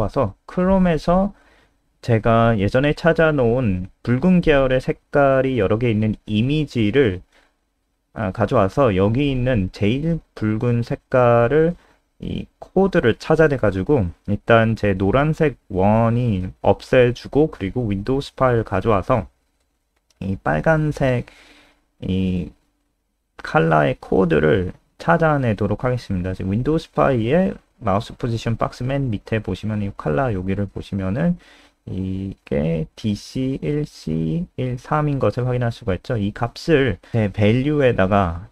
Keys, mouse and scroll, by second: 1.2 click, 1.3 click, 2.5 ctrl+v, 2.9 Return, 4.0 click, 11.4 ctrl+alt+space.